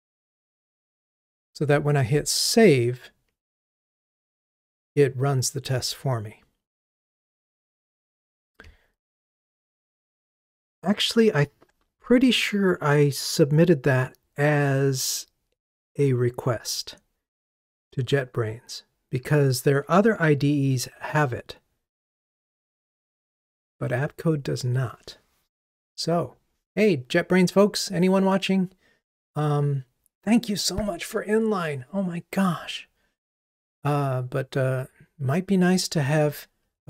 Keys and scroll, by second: 4.0 super+s.